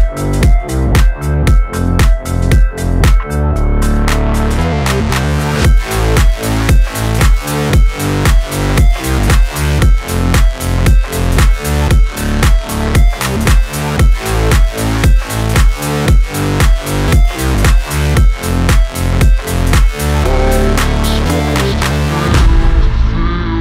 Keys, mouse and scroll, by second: 0.1-1.0 scroll up 1, 1.0 click, 1.7 scroll down 1, 2.3 scroll down 1, 3.9 shift+click, 6.5-7.1 scroll up 1, 7.1 click, 9.2-12.5 typing, 9.8 alt+click, 12.5 Left, 15.7-17.2 typing, 17.4 ctrl+a, 17.6 ctrl+c, 18.2 click, 19.4 ctrl+d, 20.6-23.4 drag.